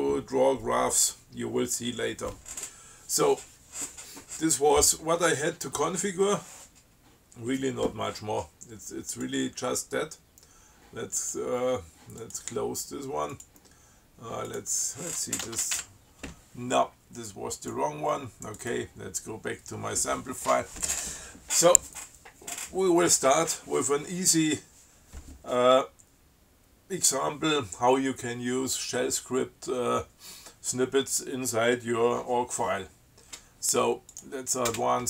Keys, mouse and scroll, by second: 9.4 click, 11.4 click, 12.5 click, 13.6 click, 14.7 click, 15.7 ctrl+x, 16.0 ctrl+1, 17.8 click, 18.8 click, 34.4 click, 34.9 space.